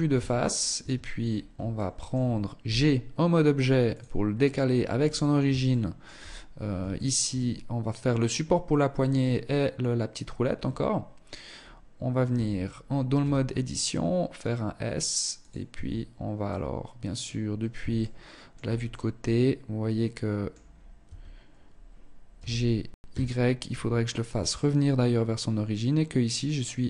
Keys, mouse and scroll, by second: 0.1 Tab, 0.5 scroll down 2, 1.1 shift+middle click, 2.0 g, 4.3-4.9 scroll up 4, 5.0 shift+middle click, 6.3 shift+middle click, 6.7-7.1 scroll down 4, 7.1-7.5 scroll up 1, 8.7-9.0 scroll up 2, 9.9 scroll down 1, 10.0 scroll up 1, 10.9 scroll up 1, 11.7 Tab, 12.5 s, 15.1 Tab, 15.7 middle click, 17.3 shift+middle click, 18.3 middle click, 20.0-20.3 scroll up 3, 20.3 Tab, 21.7 g.